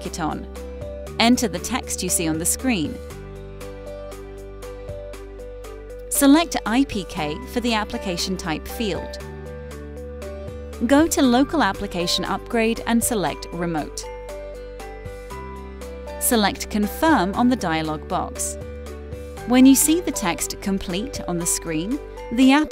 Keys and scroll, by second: 0.2 Down, 1.1 Return, 2.9 Down, 3.2 Return, 3.6 Right, 3.8 Return, 4.2 Left, 4.7 Return, 5.0 Left, 5.3 Up, 5.6 Return, 5.9 Return, 6.6 Down, 8.6 Return, 10.5 Up, 13.4 Return, 17.0 Right, 17.8 Return.